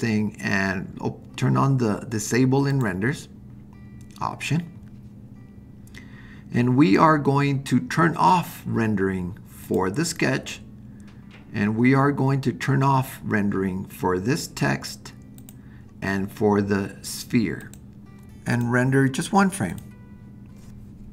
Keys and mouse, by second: 9.7 click, 15.4 click, 17.6 click, 18.6-21.1 drag.